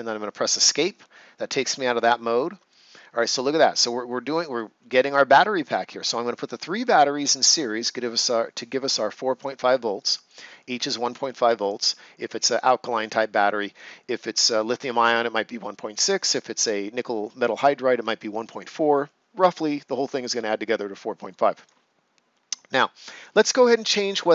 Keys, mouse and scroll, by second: 0.6 Escape, 2.1 scroll down 1, 2.6 right click, 3.1 ctrl+scroll down 1, 3.5 right click, 5.2 right click, 9.9 right click, 21.3 right click.